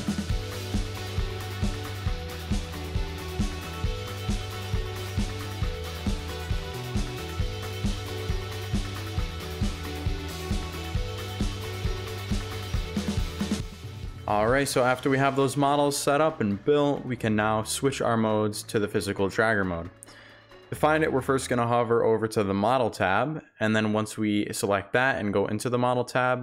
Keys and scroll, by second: 0.5-2.1 typing, 5.3-7.7 typing, 9.1 Pause, 9.7-12.0 typing, 13.7 s, 17.7 a, 24.4 Home, 24.9-26.4 typing.